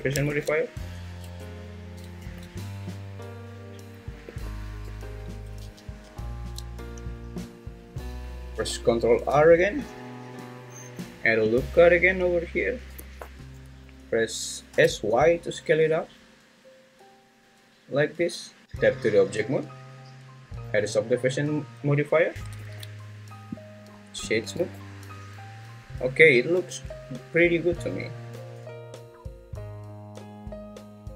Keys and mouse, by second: 0.3 ctrl+2, 1.2 Tab, 2.2 ctrl+2, 4.2 `, 4.9 `, 5.6 ctrl+z, 6.1 ctrl+z, 9.3 ctrl+r, 13.0 Escape, 14.7 s, 15.1 y, 18.6 Tab, 22.6 ctrl+2, 23.9 right click, 24.6 `, 26.7 `, 29.2 Tab.